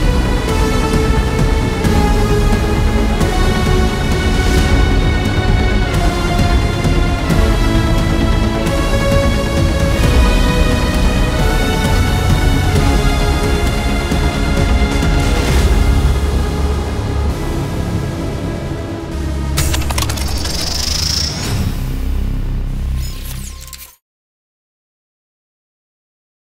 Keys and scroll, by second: 0.0-1.4 typing, 7.3 Return, 8.8-9.8 typing.